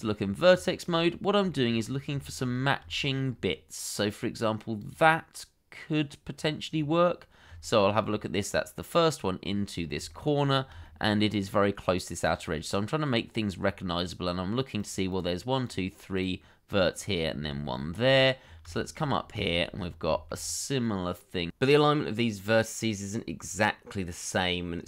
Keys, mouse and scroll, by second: 0.1 scroll up 1, 0.6 shift+middle click, 1.0-1.4 scroll up 1, 1.5 shift+middle click, 1.7-2.2 scroll up 1, 2.2 shift+middle click, 2.4-2.9 shift+scroll up 1, 2.9 shift+middle click, 3.2-5.3 scroll up 1, 6.3 scroll down 1, 7.6 shift+middle click, 8.0 scroll down 1, 9.4-9.7 scroll up 1, 10.1 shift+middle click, 10.5 scroll up 1, 10.8 shift+middle click, 13.1 scroll down 1, 13.6-15.1 scroll up 1, 15.1 double click, 16.9 scroll down 1, 17.6 shift+middle click, 18.4 scroll down 1, 18.7 shift+middle click, 19.0-19.4 scroll up 1, 19.4 shift+middle click, 19.7-20.1 scroll up 1, 20.1 shift+middle click, 20.4 scroll up 1, 21.9 double click, 23.2 scroll down 1.